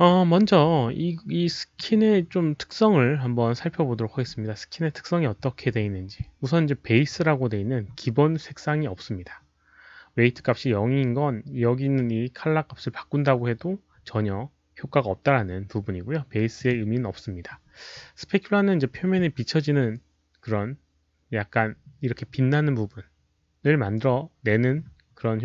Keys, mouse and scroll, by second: 0.5 alt+right click, 3.6 middle click, 4.1 middle click, 16.5 click, 21.3 click.